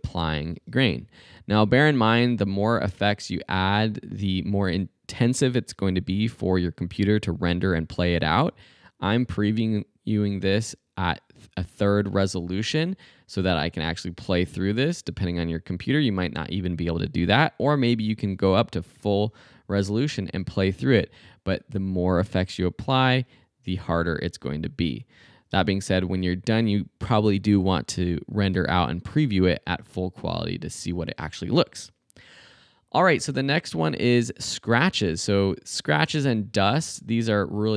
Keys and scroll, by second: 0.6 space, 20.4 space, 22.4 space, 25.5 space.